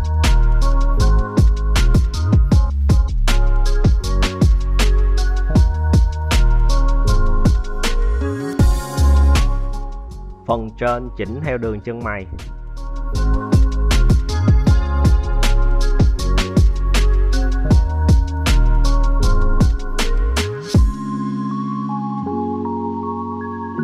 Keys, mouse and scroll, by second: 0.3 g, 1.8 click, 2.3 right click, 2.5 g, 3.7 right click, 3.9 g, 4.9 right click, 5.1 g, 6.4 right click, 6.7 g, 8.0 right click, 8.2 g, 9.1 right click, 9.2 g, 10.5 right click, 10.8 g, 12.0 right click, 12.3 g, 13.2 right click, 13.5 g, 15.0 right click, 15.3 g, 16.0 right click, 16.2 g, 17.0 right click, 17.3 g, 18.5 right click, 18.7 g, 19.8 right click, 20.0 g, 20.7 right click, 20.9 g, 22.2 `.